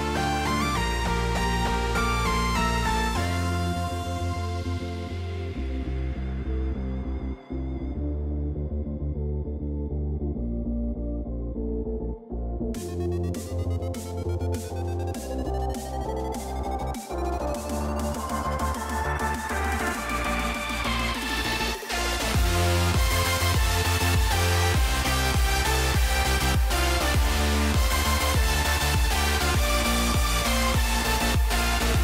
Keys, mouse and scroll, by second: 1.1 Tab, 3.8 click, 6.8 click, 7.1 Tab, 7.9 click, 10.4-12.0 drag, 12.2-15.4 drag, 15.9 Tab, 17.5 click, 19.9 middle click, 20.7 middle click, 21.4-22.4 drag, 23.1 click.